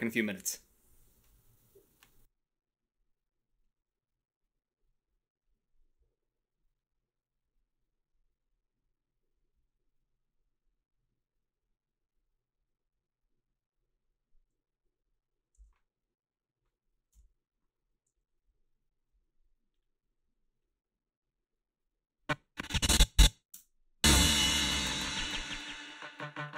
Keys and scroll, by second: 17.2 Delete, 23.6 space.